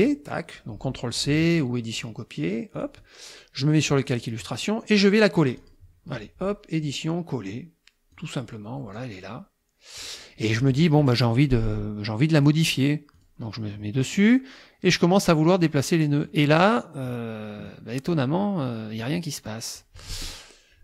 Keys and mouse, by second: 2.0 click, 2.8 click, 4.1 click, 4.7 click, 5.6 click, 6.9 click, 8.1 click, 9.0-10.2 drag, 12.4 click, 13.2 click, 15.7 click, 17.7 click, 19.0-20.0 drag.